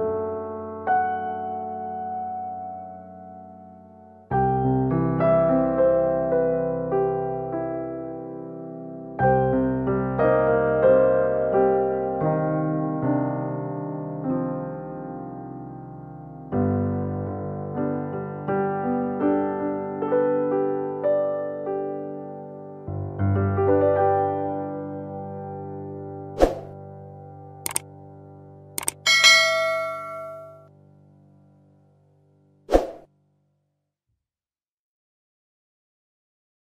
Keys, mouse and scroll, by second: 0.5 g, 1.6 s, 2.4 g, 4.7 g, 6.8 r, 7.5 g, 9.6 g, 11.4 r, 13.8 g, 14.9 e, 15.8 r, 16.7 g, 17.6 g, 18.7 r, 19.3 s, 20.2 g, 21.1 g, 22.3 r, 23.1 s, 24.0 Tab, 24.0 click, 24.4 click, 25.2 g, 29.1 scroll up 4, 29.7 shift+middle click, 30.3 scroll down 2, 30.9 shift+middle click, 30.9-31.2 scroll down 2, 31.9 middle click.